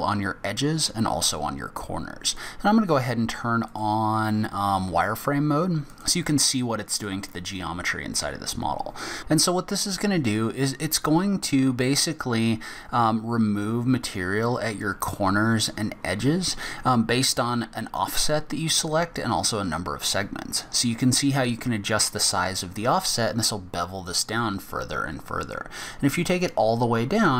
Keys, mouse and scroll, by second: 2.3 click, 3.7 click, 6.9 click, 7.3 scroll up 1, 8.0 scroll down 1, 8.3 scroll up 1, 19.5 click.